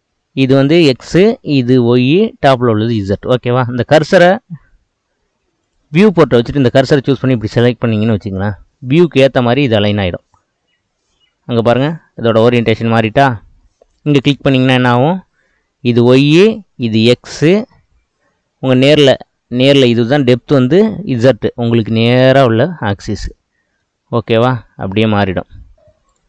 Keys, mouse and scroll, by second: 0.2-1.0 scroll down 1, 5.7-7.6 drag, 10.2-14.0 middle drag, 14.0 click, 23.3-25.8 middle drag, 26.1-26.2 right drag.